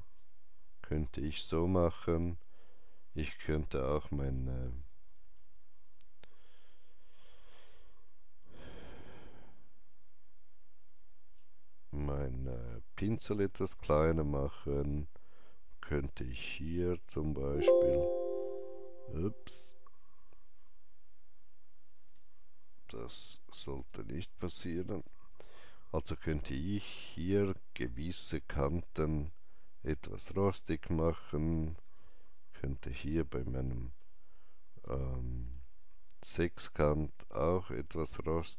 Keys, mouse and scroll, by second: 4.2 click, 4.2 scroll down 1, 5.0 scroll up 1, 7.6 ctrl+right click, 11.8 ctrl+scroll down 1, 12.4-13.8 ctrl+scroll up 1, 13.8-14.9 ctrl+scroll up 1, 15.8-23.7 drag, 23.7 right click, 24.5 click, 27.8-31.9 drag, 27.8 right click, 31.9-37.1 alt+drag, 33.4 shift+middle click, 34.8 shift+middle click, 37.1-38.5 drag.